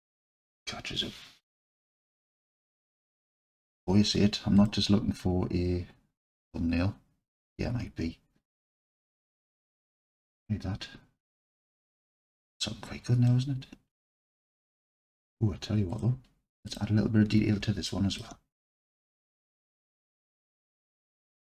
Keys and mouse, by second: 4.6 click, 10.2 click, 13.3-14.9 alt+drag, 16.1 click, 17.3 Tab, 17.9 alt+click, 18.8 click, 20.1 KP_Decimal, 21.3 KP_1.